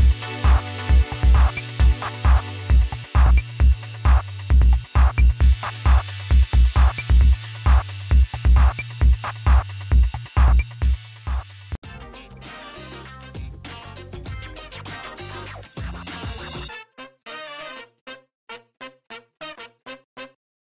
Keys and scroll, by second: 2.0 Return, 5.9 ctrl+KP_Add, 7.6 ctrl+KP_Subtract.